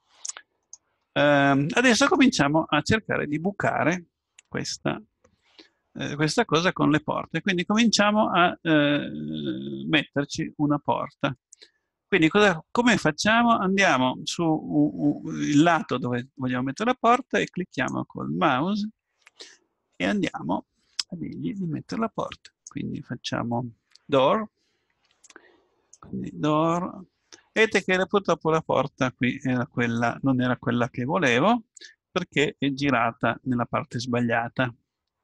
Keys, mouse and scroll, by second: 1.0-4.5 middle drag, 17.8-27.8 drag.